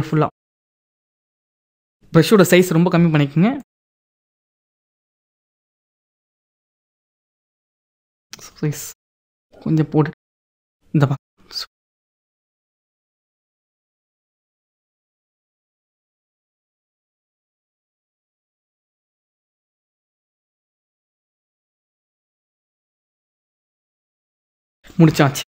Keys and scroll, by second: 0.3 F9, 25.4 ctrl+-.